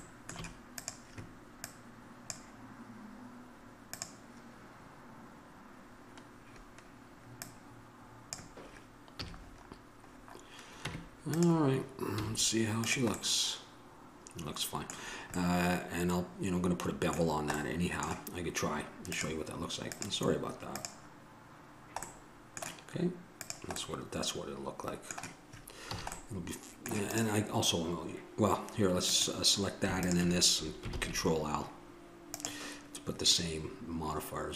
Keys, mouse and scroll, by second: 1.0-4.1 right drag, 4.1-6.6 drag, 7.6-9.6 drag, 9.4 a, 9.6 middle click, 15.2-17.8 middle drag, 21.1 click, 22.0 middle click, 24.0 click, 24.5-26.1 middle drag, 26.1 a, 26.4 middle click, 27.3-31.1 right drag, 31.1 ctrl+l.